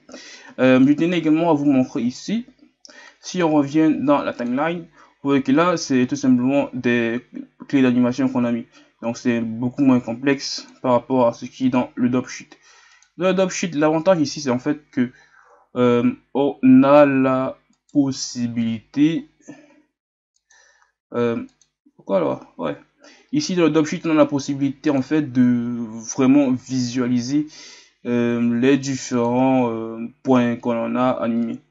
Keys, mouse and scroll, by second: 17.0 scroll down 5, 17.1 a, 24.8-31.7 drag.